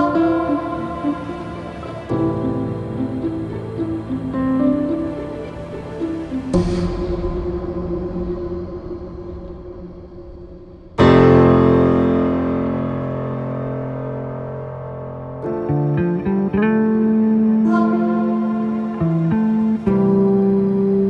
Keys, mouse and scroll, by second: 3.4 shift+middle click, 4.0-4.5 scroll up 1, 4.5 n, 5.7-6.7 shift+middle drag, 6.7-7.4 shift+scroll down 1, 7.4-7.8 scroll down 1, 7.8-9.3 shift+middle drag, 9.3 n, 9.9 click, 10.3 n, 12.8 shift+a, 15.4 g, 17.9 ., 19.4 scroll down 2, 19.7-20.2 middle drag, 20.2-20.8 scroll down 6, 20.8 middle click.